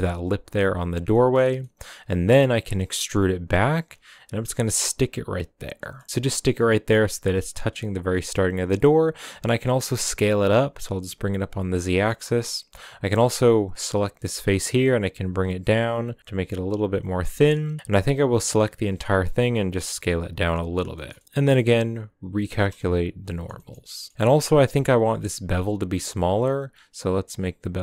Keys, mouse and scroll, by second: 1.1 middle click, 1.5 scroll down 1, 1.6 middle click, 2.3 e, 5.8 middle click, 6.0 scroll down 1, 6.1-7.7 shift+middle drag, 7.7-8.2 scroll down 1, 8.2 s, 11.7 scroll down 1, 11.8 middle click, 12.2-13.8 scroll down 1, 13.8 right click, 14.3 s, 17.1 scroll down 2, 17.2 middle click, 18.0-18.5 scroll up 1, 18.5 l, 19.2 s, 20.9 shift+middle click, 21.2 s, 22.4 shift+n, 22.7-23.8 middle drag, 23.8 scroll down 1, 23.9 middle click, 24.1-25.1 scroll up 5, 25.2 Tab, 27.0-27.8 shift+drag.